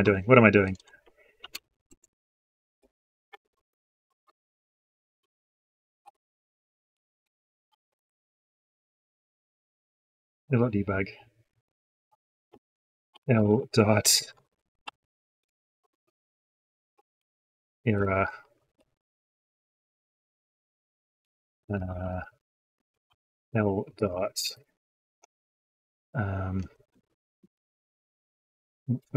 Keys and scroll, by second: 1.7 ctrl+space, 15.7 ctrl+space, 27.2 ctrl+space.